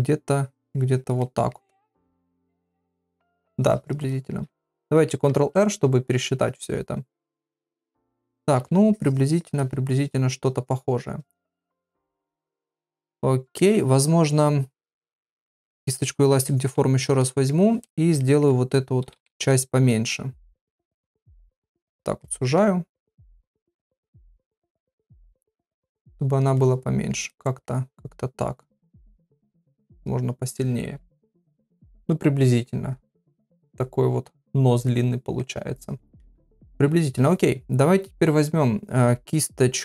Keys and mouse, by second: 0.4 click, 1.2 middle click, 1.9 click, 2.5 middle click, 3.4 shift+click, 4.1 middle click, 5.3 ctrl+r, 7.5-8.6 middle drag, 8.9 shift+click, 9.6-13.5 middle drag, 16.5 middle click, 16.7 ], 17.0 ], 17.2 middle click, 17.2 ], 18.2 middle click, 19.0 ], 19.2 ], 19.5 middle click, 20.6 click, 21.6 click, 22.2 middle click, 24.2 click, 24.8 click, 25.4 click, 25.9 click, 26.6 middle click, 27.3 middle click, 28.1 click, 28.6 click, 29.1 click, 29.3 middle click, 30.1 click, 30.6 middle click, 31.6 ctrl+middle click, 32.0-35.3 middle drag.